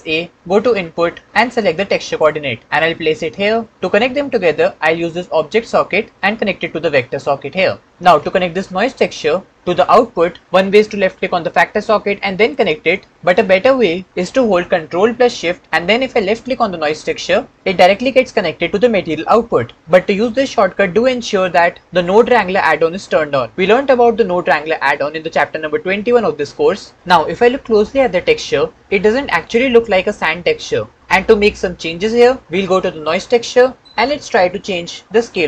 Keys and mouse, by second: 6.2-7.4 drag, 11.3-12.5 drag, 17.0 ctrl+shift+click, 33.8-35.1 drag.